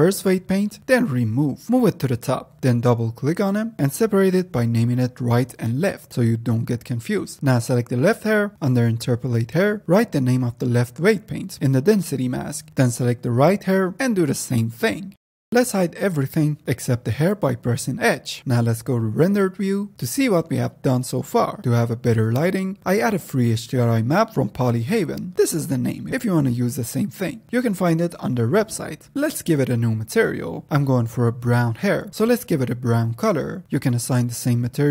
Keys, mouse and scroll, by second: 0.3 click, 0.9 click, 2.1-5.0 drag, 5.6 click, 6.2-7.4 drag, 8.4 click, 8.8-13.0 drag, 13.9-15.5 drag, 18.7 z, 21.8 shift+a, 23.2 click, 23.2 x, 23.8 click.